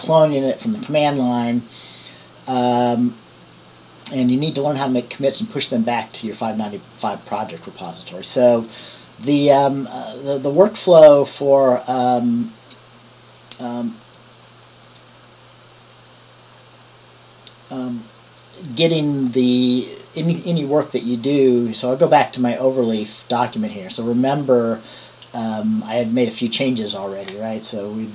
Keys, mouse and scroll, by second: 9.5-10.5 drag, 14.2-18.4 drag, 21.3-22.4 drag.